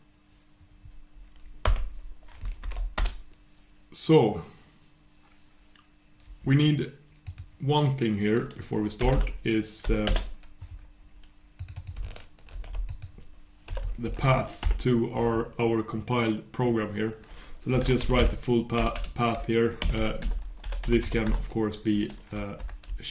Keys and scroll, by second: 7.2 super+\, 15.1 super+\.